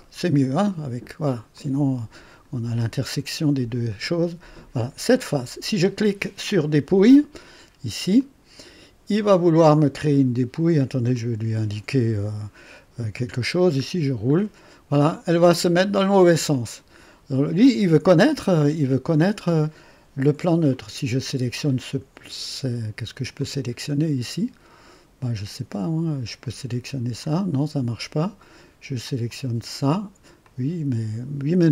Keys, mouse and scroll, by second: 1.6 click, 4.4 click, 8.1 click, 9.2-10.2 drag, 11.1 click, 13.7-14.0 scroll up 2, 14.2 scroll up 2, 14.9-15.2 scroll up 2, 15.5 scroll up 2, 16.5-19.7 drag, 20.7 click, 23.4-25.6 drag, 26.4 click, 27.2-28.0 drag, 29.2 click, 30.4-31.3 drag.